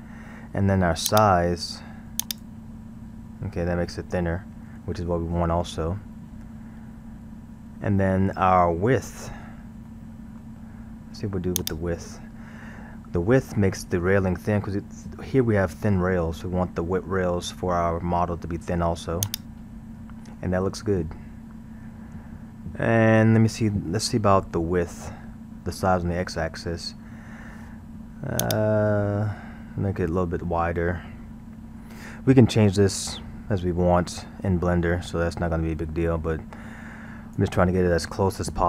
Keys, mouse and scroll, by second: 1.1-3.3 drag, 6.5-7.7 scroll, 9.9-11.6 middle drag, 11.6-13.0 drag, 19.3 click, 21.0-24.1 middle drag, 28.5-31.4 drag.